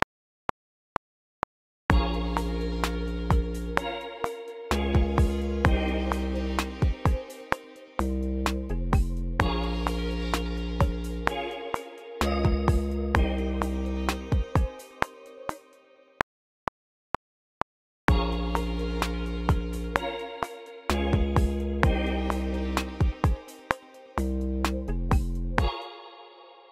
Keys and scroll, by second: 15.2-16.6 typing, 25.3 space, 26.0 q.